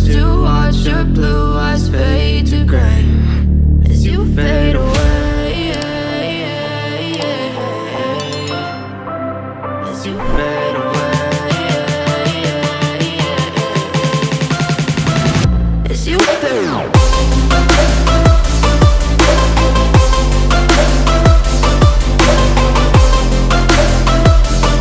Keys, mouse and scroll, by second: 1.9 scroll down 1, 9.2 click, 9.9 F4, 12.0 F9, 14.4 click, 17.5 scroll down 1, 20.5 click, 22.0 F4, 24.0 F9.